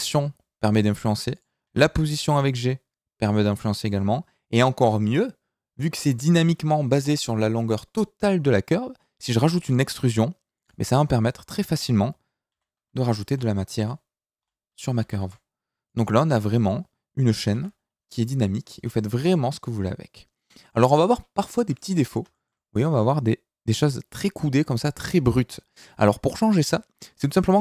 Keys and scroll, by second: 1.6 g, 9.2 e, 12.5 e, 13.2 t, 15.2 r, 17.5 e, 18.7 s, 25.1 Tab, 26.9 z.